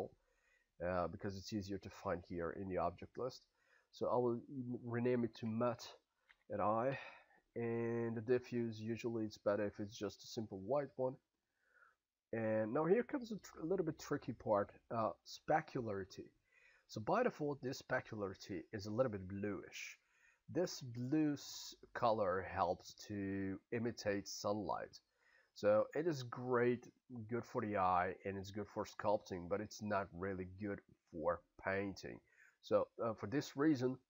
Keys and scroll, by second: 6.2 y, 7.0 e.